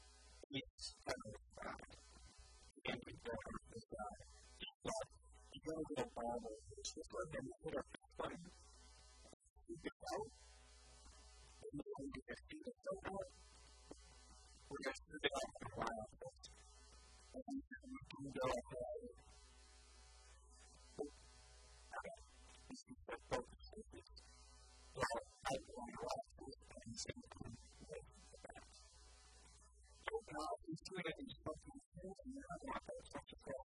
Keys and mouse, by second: 2.9 KP_1, 6.4-8.2 shift+drag, 7.9 middle click, 7.9 right click, 8.2 KP_1, 8.5 KP_3, 8.9 KP_1, 9.3 e, 10.5 g, 11.3 click, 11.3 a, 11.5 middle click, 11.8 click, 12.3 middle click, 12.3 right click, 12.9 e, 14.2 ctrl+z, 15.1 e, 16.5-18.0 drag, 18.5 Tab, 19.5 KP_1, 20.0 Tab, 21.3 ctrl+z, 21.7 ctrl+z, 21.9 ctrl+z, 24.0 e, 26.2 click, 26.9 middle click, 26.9 right click, 27.9 e, 29.5 KP_1, 29.9 KP_3, 32.1 a, 32.3 a, 32.7 b.